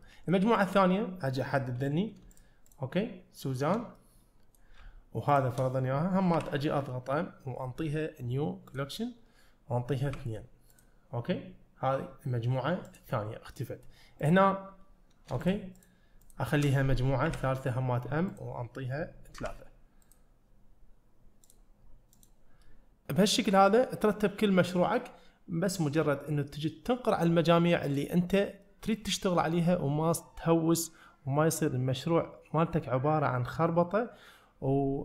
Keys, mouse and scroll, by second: 0.1 middle click, 0.6 click, 1.4 middle click, 2.4 shift+click, 2.7 shift+click, 4.0 middle click, 5.4 shift+click, 6.4 m, 12.9 click, 13.6-13.9 middle drag, 14.3-15.3 drag, 15.5 shift+click, 15.8 shift+click, 16.3 shift+click, 17.3 m, 21.5 drag, 22.2 click, 22.7 middle click, 27.9 click, 28.7 middle click.